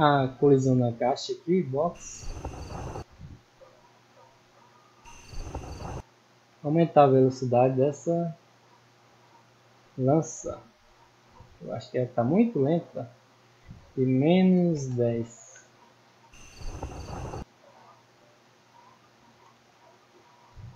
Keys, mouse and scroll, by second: 0.5 click, 3.7 click, 6.6 right click, 7.0 right click, 7.7 right click, 8.8 middle click, 9.6 middle click, 11.0 click, 11.5 middle click, 13.4 click, 15.7 click, 17.7 middle click, 18.3 right click, 20.4 click.